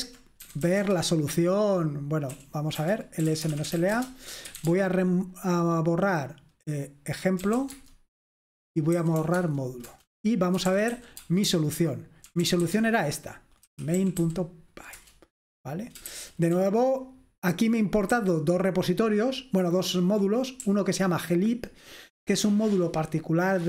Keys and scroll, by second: 0.0-5.1 typing, 7.3-14.9 typing, 16.1-18.1 typing, 20.6-22.0 typing.